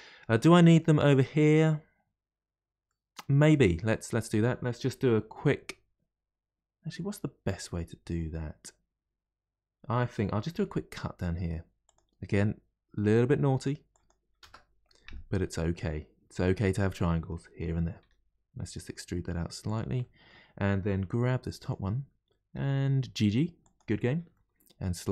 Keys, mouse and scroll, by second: 3.5-3.9 scroll up 1, 3.9-6.9 middle drag, 14.9-16.3 middle drag, 16.3 3, 16.7 click, 17.0-18.0 middle drag, 18.0 e, 20.0-21.0 middle drag, 21.0 2, 21.6 click, 22.5 g, 24.3 middle click.